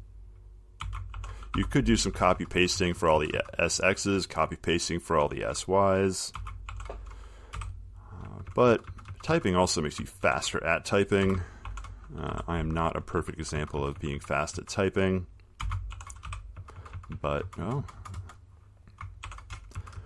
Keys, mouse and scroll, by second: 0.0-2.4 typing, 6.6-8.5 typing, 11.5-13.1 typing, 14.0 Right, 14.2 Right, 14.6-16.8 typing, 19.3-20.0 typing.